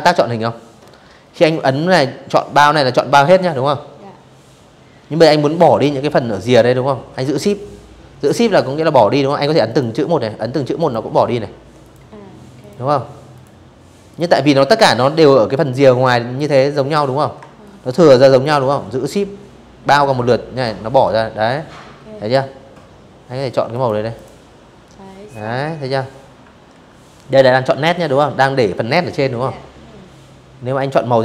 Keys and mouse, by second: 7.3 shift+click, 8.5 shift+click, 9.5 shift+click, 10.3 shift+click, 11.0 shift+click, 11.8 shift+click, 13.7 click, 15.3-18.3 shift+drag, 21.4 click, 21.8 click, 24.4 ctrl+z, 28.5 click, 30.1 shift+x, 30.7 shift+x.